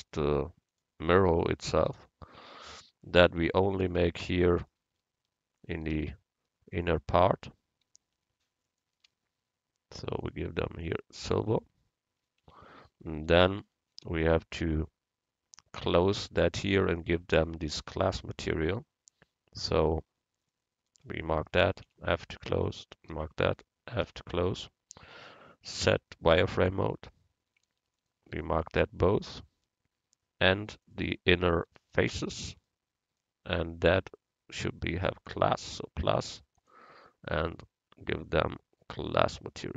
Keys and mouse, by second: 2.8 Tab, 3.6 right click, 4.3-5.9 middle drag, 6.1-9.6 drag, 10.3-12.5 drag, 10.3 right click, 12.5 Tab, 13.2 Tab, 19.7-21.9 drag, 21.9 f, 24.1 f, 25.9 z, 29.1-30.9 right drag, 30.9-33.1 drag, 32.1 right click, 33.8-35.5 middle drag, 35.5-38.6 drag, 39.1-39.7 drag.